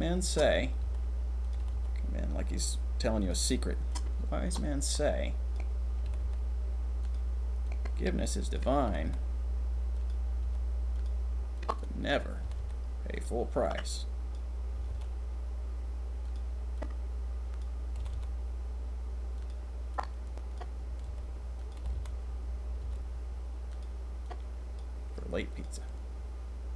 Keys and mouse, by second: 0.8 r, 1.8 r, 3.9 click, 6.0 r, 6.2 r, 7.0 click, 7.6-8.3 drag, 9.0 r, 9.2 r, 10.4 r, 11.6-12.1 drag, 12.5 r, 12.6 r, 13.6-14.3 drag, 14.9 r, 16.2 click, 18.0 r, 18.1 r, 19.9-20.6 drag, 21.0 r, 21.9 r, 22.8 r, 24.2-24.8 drag, 25.6 click, 25.8 click.